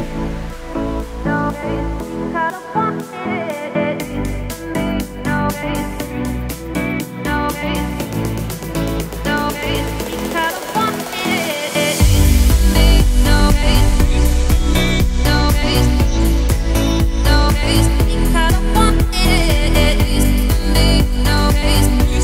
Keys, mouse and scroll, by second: 0.2-0.6 scroll up 3, 0.6 g, 2.1-2.8 scroll down 2, 2.8-3.2 scroll down 2, 3.2 g, 4.7 scroll down 2, 5.8 shift+middle click, 6.4-6.9 scroll up 2, 6.9 click, 7.6-8.2 scroll up 3, 8.2 click, 9.2-13.2 right drag, 13.2-14.0 scroll down 11, 14.0-14.7 scroll up 12, 14.7 shift+middle click, 15.0-15.4 scroll up 4, 15.4 Tab, 15.8 click, 16.3 Tab, 16.5-17.8 scroll down 4, 17.8-18.9 scroll up 1, 18.9-21.5 shift+drag, 21.5 `, 21.9-22.2 middle drag.